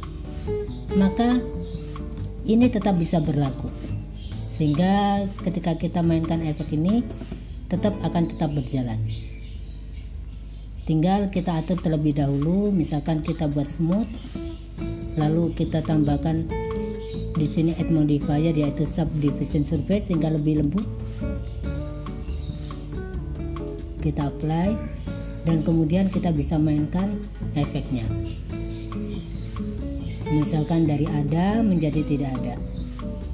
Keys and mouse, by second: 1.9 click, 3.6-7.9 drag, 9.1-10.5 drag, 11.4 click, 13.1 click, 13.6 click, 17.5-20.9 drag, 23.7-24.5 drag, 26.1-28.4 drag, 29.4 click, 30.5-33.3 drag.